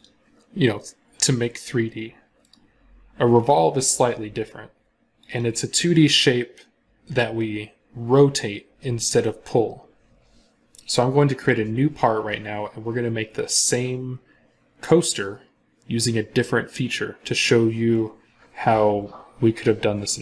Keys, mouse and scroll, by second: 2.3 right click.